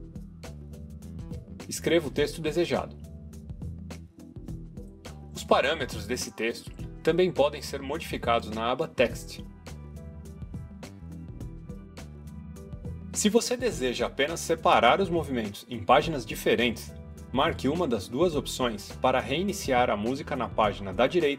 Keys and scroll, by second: 0.0-2.1 typing.